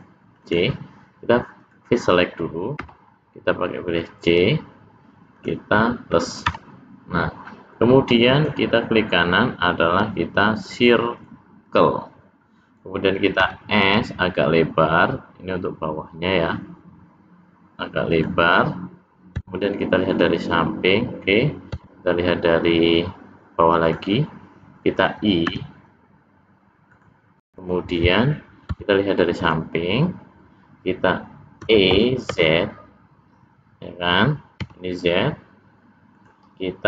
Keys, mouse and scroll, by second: 1.7 click, 2.9 c, 6.5 ctrl+KP_Add, 8.4 right click, 13.4 s, 31.6 e.